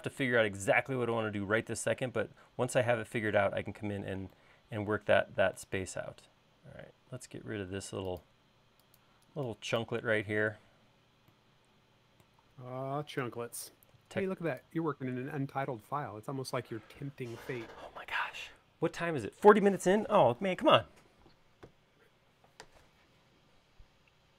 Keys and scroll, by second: 9.7 e, 11.1 p, 16.6 space, 21.1 super+s.